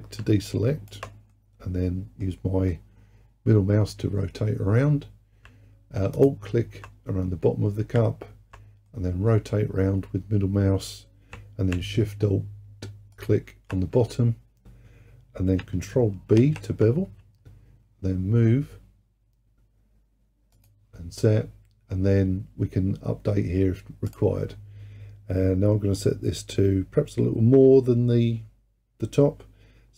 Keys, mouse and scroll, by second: 0.5 alt+click, 1.4-5.9 middle drag, 6.2 alt+click, 9.0-11.9 middle drag, 13.2 alt+shift+click, 16.4 ctrl+b, 24.1-27.3 drag.